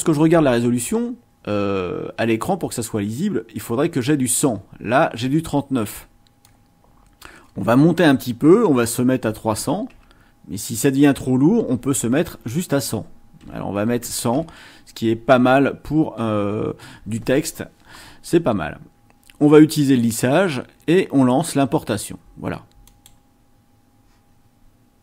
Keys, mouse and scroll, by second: 6.4 click, 22.8 click.